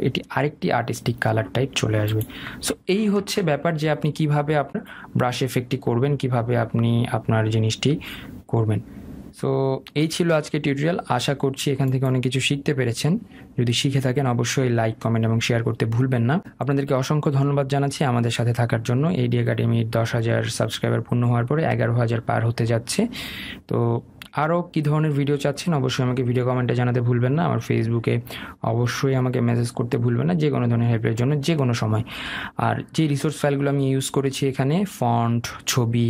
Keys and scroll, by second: 4.2 ctrl+alt+z.